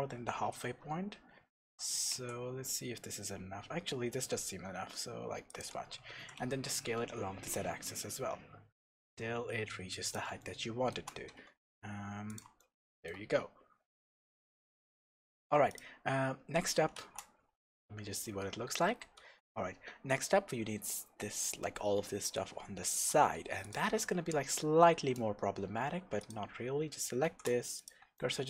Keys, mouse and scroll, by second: 1.6 g, 5.6 click, 6.1 s, 10.1 click, 10.4-12.4 shift+middle drag, 11.3 g, 12.4 click, 12.6-15.7 shift+middle drag, 14.3 Tab, 14.6-15.4 scroll down 1, 15.4 Tab, 15.7 click, 16.1 scroll up 1, 16.6 scroll down 1, 17.0 shift+z, 18.5-19.2 scroll up 1, 19.2 shift+z, 19.5-21.9 scroll down 1, 23.6 click, 24.0 Tab, 24.2-24.7 scroll down 1, 24.7 scroll up 1, 26.2 click, 26.8 scroll up 1, 27.2 shift+s, 28.2 shift+middle click.